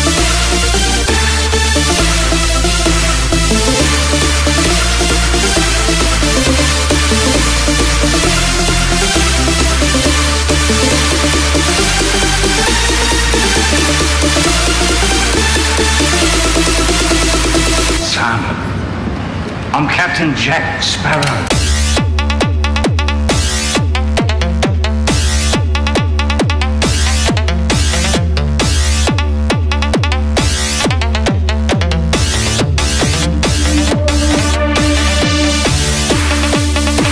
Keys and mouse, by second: 3.0 click, 7.0 click, 9.6 KP_6, 11.6 click, 13.6 click, 15.6 Tab, 17.0 click, 19.0 KP_4, 23.0 shift+a, 27.0 r, 31.7 click, 33.0 g.